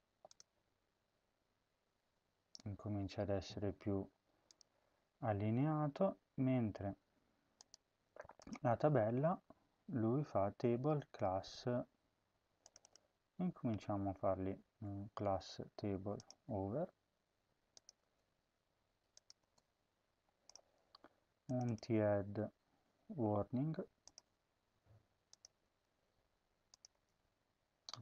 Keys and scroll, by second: 14.5 ctrl+a, 19.3 space, 22.1 ctrl+a, 22.5 ctrl+c, 25.5 ctrl+v, 26.7 space.